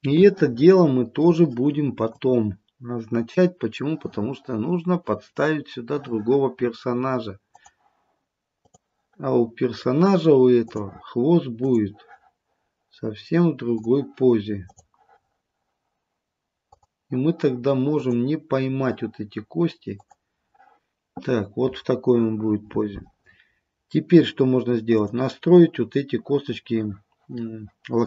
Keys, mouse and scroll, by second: 0.2 scroll up 1, 0.4 shift+middle click, 2.2 click, 7.5 click, 8.6 click, 10.8 click, 11.6 click, 13.9 click, 16.8 click, 18.0 click, 20.0 click, 23.6-25.0 scroll up 1, 25.0 click.